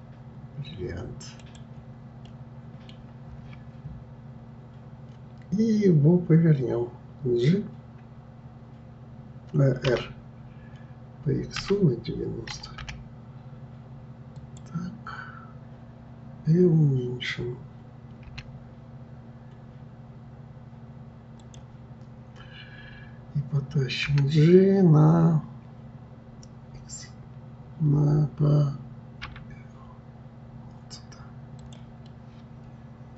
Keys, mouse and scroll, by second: 2.2-5.2 middle drag, 32.0-33.1 middle drag.